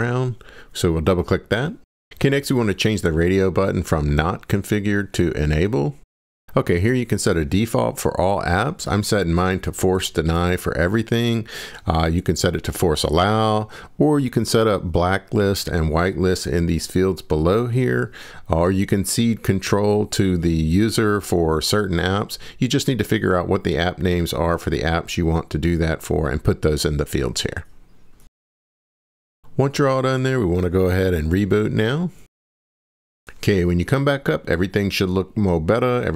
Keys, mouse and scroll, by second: 30.4 click, 30.9 click.